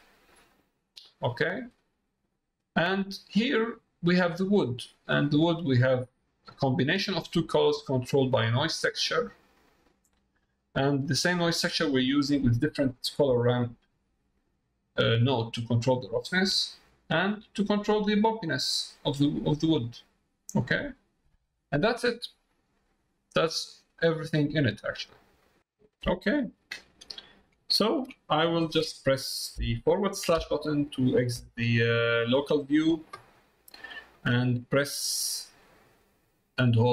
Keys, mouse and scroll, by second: 0.4 middle click, 1.4 middle click, 2.6 middle click, 4.3 middle click, 5.6 middle click, 6.6 middle click, 7.5 middle click, 8.6 click, 10.2 middle click, 13.3-14.4 drag, 16.3 middle click, 17.3 click, 23.3 middle click, 24.6 middle click, 25.6 middle click, 26.5 middle click, 27.7 shift+middle click, 28.2 middle click, 31.9-33.0 middle drag, 33.3 middle click, 34.2 middle click, 34.8 middle click.